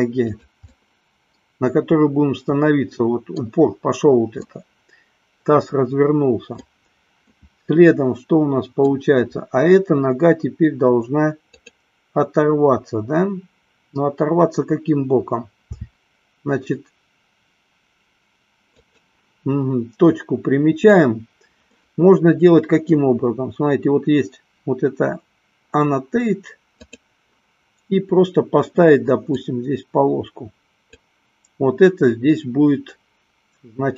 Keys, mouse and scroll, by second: 0.6 click, 1.0-3.9 middle drag, 4.9-6.8 middle drag, 7.5-9.0 middle drag, 11.4 click, 15.6 r, 21.8-23.1 middle drag, 29.5-31.0 drag.